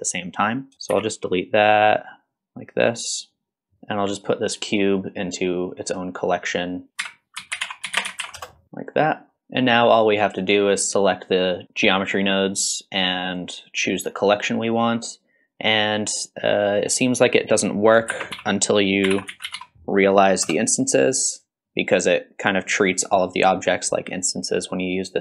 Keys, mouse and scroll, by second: 0.7 shift+right click, 0.7 click, 0.9 x, 1.8-2.8 drag, 3.3 click, 4.1 click, 5.7-6.3 drag, 7.0 c, 7.2-9.0 drag, 9.3 x, 11.0 click, 14.0 click, 17.5 click, 18.1 shift+a, 22.5 click.